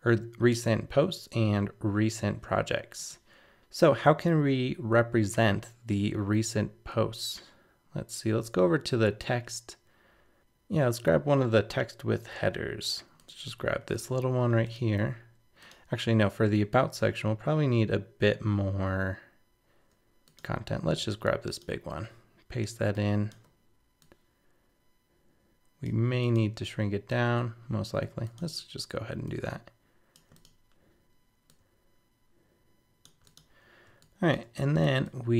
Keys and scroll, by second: 3.6 super+-, 13.9 super+c, 21.9 super+v.